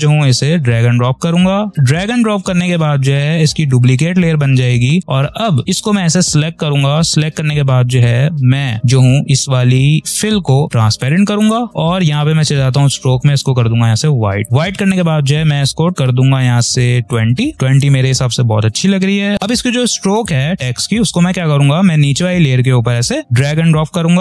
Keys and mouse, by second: 6.1 click, 10.0 click, 17.0 click, 20.1-24.2 drag.